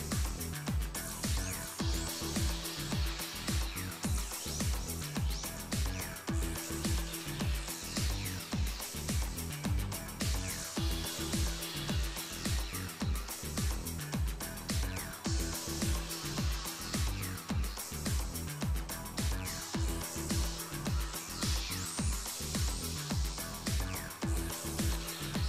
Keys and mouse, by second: 0.3 middle click, 1.4 middle click, 2.6 ctrl+Tab, 4.5 click, 4.9 ctrl+x, 5.3-7.2 drag, 5.8 ctrl+x, 7.0 ctrl+x, 7.5 ctrl+x, 8.0 ctrl+x, 8.3 ctrl+x, 8.8 ctrl+x, 9.1 ctrl+x, 10.3 ctrl+x, 12.5 ctrl+x, 13.6 ctrl+x, 14.7 middle click, 14.8 middle click, 14.8 ctrl+x, 15.2 KP_7, 18.4-20.5 drag, 20.5 z, 21.9 z, 22.6 z, 23.0 z, 23.6-24.8 middle drag.